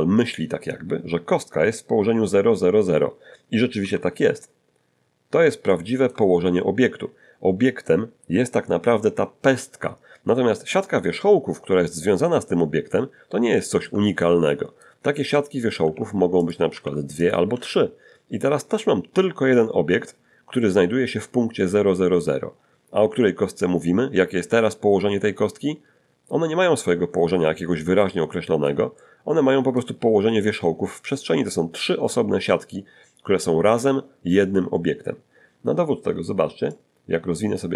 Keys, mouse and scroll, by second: 3.8 n, 5.7 shift+click, 13.1 scroll down 1, 13.6 shift+click, 14.2 shift+click, 15.0 Tab, 15.8 shift+d, 16.4 shift+click, 16.7 d, 17.2 shift+click, 26.8-28.8 middle drag, 29.0-30.0 middle drag, 36.7-37.7 drag.